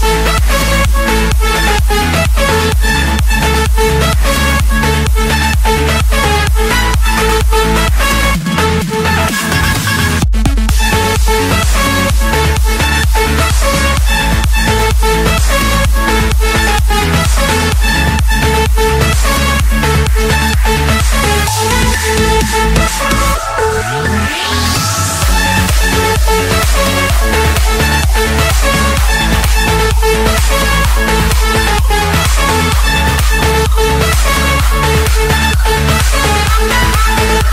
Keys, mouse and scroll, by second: 0.0-0.7 typing, 1.7 Return, 1.9-3.0 typing, 4.8 click, 6.2-6.5 scroll down 5, 6.5-7.3 scroll up 5, 7.5-7.8 scroll, 7.9 click, 8.4 Escape, 9.5 c, 10.2 Return, 12.5 click, 15.9 typing, 16.7 Return, 17.9 Escape, 18.9 click, 19.4 click, 20.7 click, 21.1 shift+click, 22.6-23.8 typing, 24.8 Return, 27.5-28.0 typing, 28.5 Return, 29.4-29.7 scroll down 2, 30.6 Escape, 31.3 click, 32.3 click, 32.8 click, 33.1-33.6 scroll, 34.1 click, 36.2-37.4 drag.